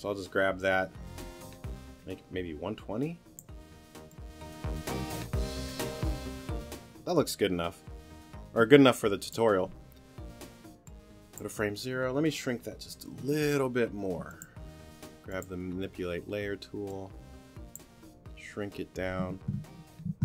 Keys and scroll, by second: 13.2 t.